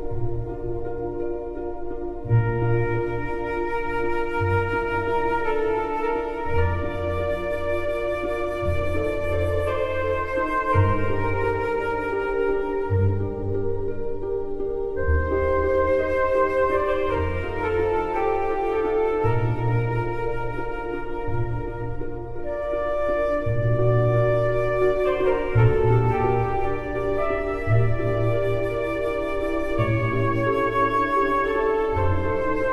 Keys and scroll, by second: 2.7 BackSpace, 25.8 ctrl+=.